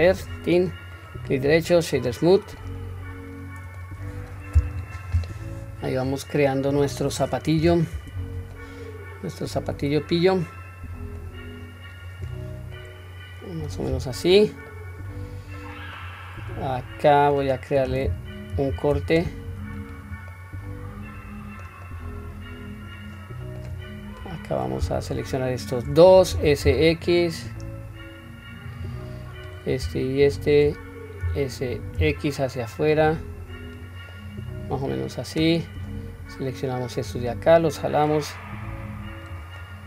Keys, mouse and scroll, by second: 0.1 click, 1.0-2.2 right drag, 2.6-3.9 middle drag, 4.1-4.5 scroll down 1, 4.5-6.1 middle drag, 7.6 Tab, 8.1-9.5 scroll up 2, 8.5-9.7 middle drag, 10.3-11.2 middle drag, 11.6-12.7 scroll down 1, 12.7-13.7 middle drag, 14.7-15.6 middle drag, 16.0-17.3 middle drag, 18.5 ctrl+r, 20.3-21.6 middle drag, 21.8-23.6 middle drag, 24.1 click, 25.2 shift+click, 26.3 s, 29.4 click, 30.2 shift+click, 31.2 s, 34.1-35.4 middle drag, 35.8-36.2 drag, 37.1-39.3 drag, 39.6-39.8 middle drag.